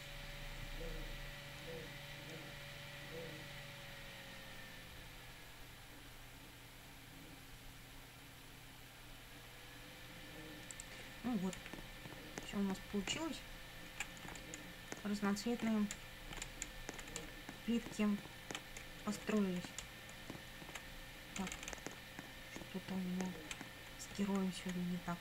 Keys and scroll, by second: 11.6 Up, 13.2 Right, 14.1 Up, 14.4 Left, 14.6 Up, 15.8 Left, 16.0 Up, 17.1 Left, 17.2 Down, 18.8 Left, 19.1 Up, 21.4 Down, 24.2 Left, 25.0 Up.